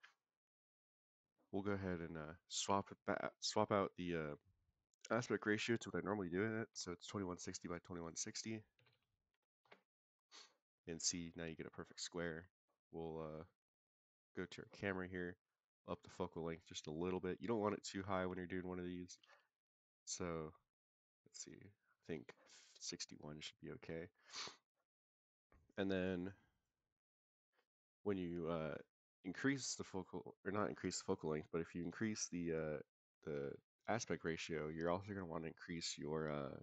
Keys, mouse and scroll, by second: 1.0 click, 1.8-8.0 drag, 8.1-10.0 drag, 10.6-10.9 scroll down 2, 11.4 scroll up 1, 12.4 click, 13.9 click, 14.3 click, 15.3 click, 18.4 shift+middle click, 19.8 click, 22.8-23.8 shift+middle drag, 25.5 click, 26.4 click, 27.4 click, 34.8-36.6 scroll down 5.